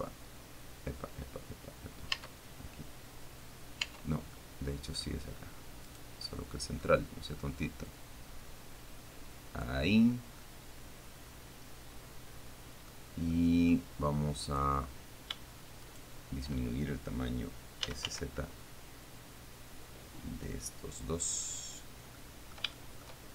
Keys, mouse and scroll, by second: 2.5 Tab, 4.2 Tab, 4.6 middle click, 6.1 right click, 6.5 middle click, 8.3-10.1 drag, 10.4 scroll down 1, 10.7 middle click, 11.1-13.3 drag, 13.6 click, 14.9 right click, 16.3 shift+right click, 17.9-18.8 typing, 21.8 click, 22.4 middle click, 23.0 shift+click.